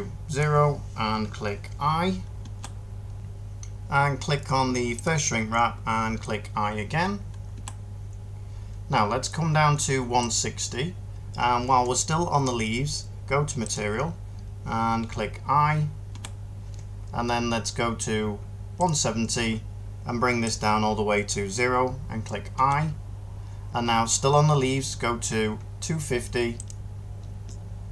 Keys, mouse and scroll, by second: 2.3 i, 7.4 i, 16.0-21.1 middle drag, 22.4-27.6 middle drag.